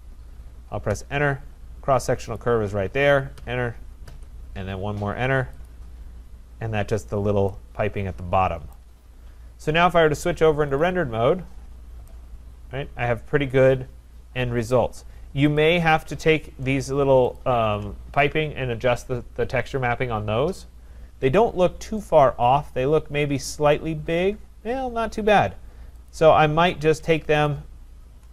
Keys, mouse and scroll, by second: 0.9 Return, 1.4 scroll, 2.4 click, 3.4 Return, 4.1 Return, 5.7 click, 6.9-7.4 scroll, 8.7 right click, 10.0 click, 10.8 click, 11.9 scroll, 14.8 right click, 15.8 click, 17.4 shift+click, 21.5-22.1 scroll, 22.2 click, 22.8 shift+right click, 23.1 scroll, 26.3 click, 27.7 shift+click.